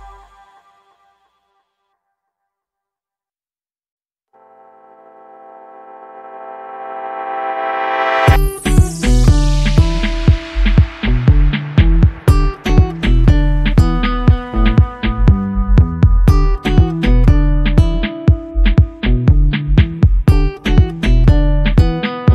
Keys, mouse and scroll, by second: 12.2-12.8 drag.